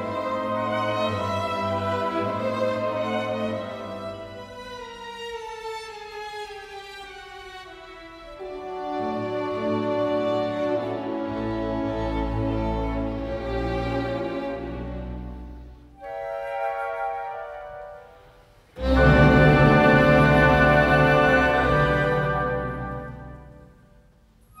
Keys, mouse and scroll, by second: 2.4 double click, 10.5 double click, 11.9-12.8 typing, 17.5 ctrl+d, 19.3 v, 21.8 ctrl+click, 23.1 v, 24.1 alt+scroll down 1.